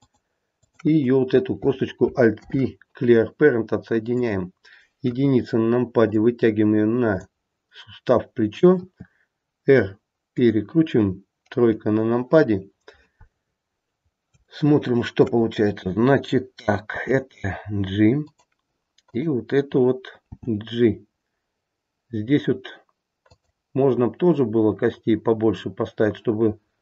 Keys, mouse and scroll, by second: 0.6 click, 2.3 alt+p, 5.0 KP_1, 6.1 click, 8.8 r, 11.4 KP_3, 13.4-13.9 scroll up 2, 14.2-15.0 scroll up 2, 15.0 shift+middle click, 16.9 g, 19.0 click, 20.2 g, 24.1-26.8 scroll down 2.